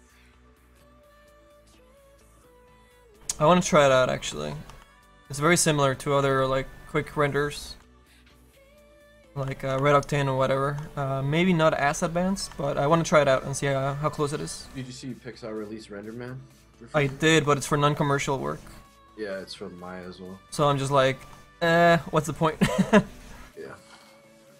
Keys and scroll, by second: 19.5 s.